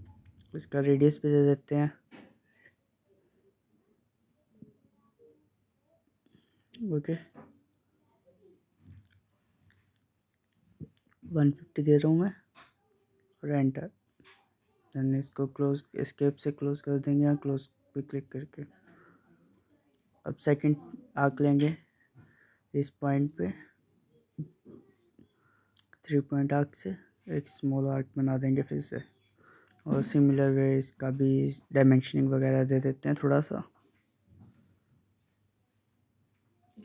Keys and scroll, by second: 9.8-11.3 typing, 24.2 Escape, 30.9 Escape.